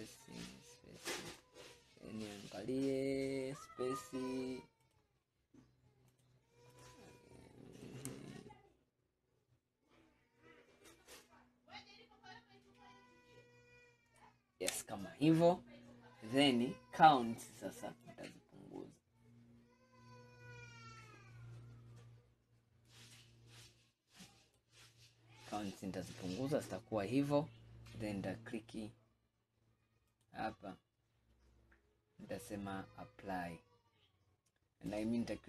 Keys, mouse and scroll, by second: 2.0-2.7 scroll up 5, 4.9-7.0 drag, 7.9-11.0 drag, 15.3-16.0 scroll down 5, 16.4-17.0 scroll up 2, 17.0 scroll down 1, 18.1-21.1 drag.